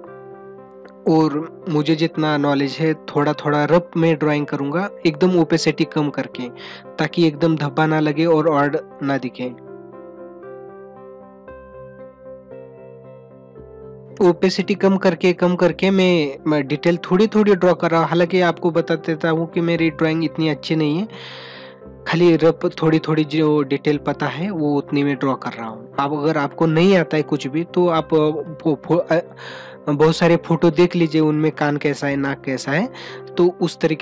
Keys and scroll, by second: 4.3 ctrl+alt+z, 10.2 ctrl+=.